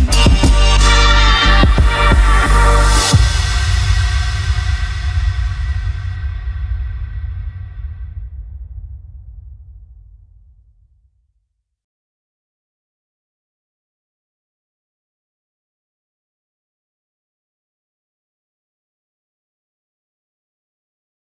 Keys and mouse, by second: 0.3 middle click, 0.6 ctrl+middle drag, 1.2 middle click, 5.9 shift+click, 6.3 shift+click, 6.7 shift+click, 7.1 shift+click, 7.6 shift+click, 8.1 shift+click, 8.5 shift+drag, 9.6 shift+click, 10.1 shift+click, 10.7 shift+click, 11.1 shift+click, 11.4 shift+click, 12.0 click, 12.5 ctrl+middle click, 12.9 shift+middle click, 13.7 click, 17.1 click, 18.4 click, 18.8 click.